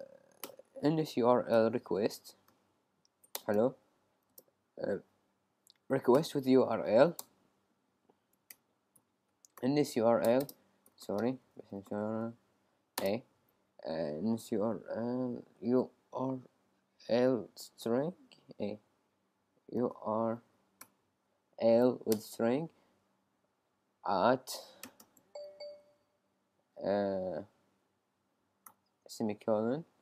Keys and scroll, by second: 0.0-0.4 typing, 1.5 shift+n, 1.8 shift+s, 2.5 shift+u, 3.4 Return, 5.9-6.8 typing, 7.2 Return, 19.8 u, 21.6 u, 22.1 Return, 23.2-23.6 typing, 24.8 shift+', 25.0 shift+', 25.7 Right, 27.7 Left.